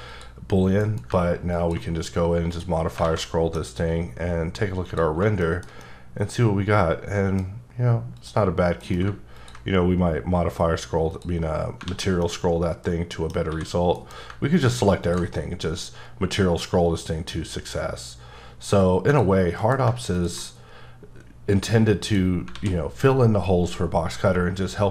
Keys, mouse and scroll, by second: 0.1 click, 0.8 m, 1.5 click, 1.9-2.5 scroll up 3, 2.5 click, 2.8-3.1 scroll down 4, 3.0 alt+a, 3.2 middle click, 4.9 click, 5.4 shift+middle click, 8.2 click, 8.8 alt+m, 9.4 ctrl+click, 9.7-11.1 scroll up 5, 11.1 click, 11.9 alt+a, 12.2 middle click, 13.5 a, 14.2 m, 15.0 ctrl+click, 15.4-16.6 scroll up 4, 16.6-17.7 scroll up 3, 17.7 scroll up 1, 18.6 click, 19.1 click, 19.8 alt+m, 20.1 ctrl+click, 20.5-20.8 scroll up 1, 21.1-22.0 scroll up 1, 22.0 click, 22.6 alt+a.